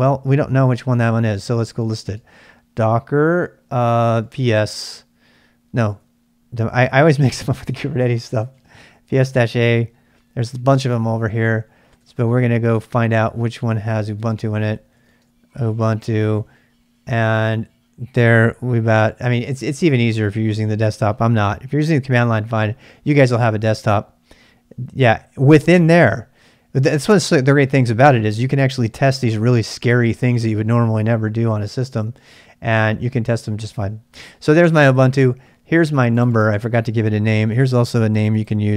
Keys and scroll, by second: 0.6-2.4 typing, 3.9-4.7 typing, 5.7-7.1 typing, 8.3-9.9 typing, 11.7-12.5 typing, 13.9-16.8 typing.